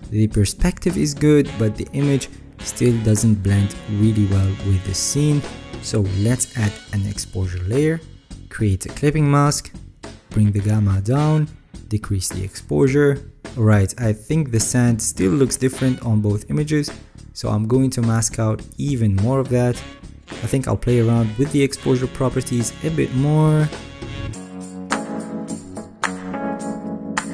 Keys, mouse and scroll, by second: 1.5-2.9 alt+right drag, 3.2 alt+scroll, 3.6 middle click, 3.6 scroll up 6, 3.9 alt+scroll, 20.5 alt+scroll up 5, 20.9-22.2 alt+scroll.